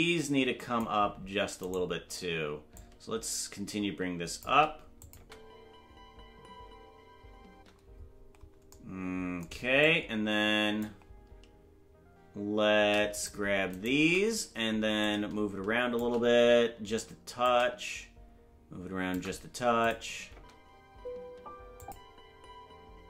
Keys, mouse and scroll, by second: 1.7 right click, 2.7-4.4 shift+drag, 5.0 click, 5.1 space, 8.7 space, 9.8-10.8 drag, 13.2 shift+right click, 13.8 shift+right click, 15.0-16.0 shift+drag, 17.4-19.2 drag, 19.8 click, 20.3 space, 21.8 click.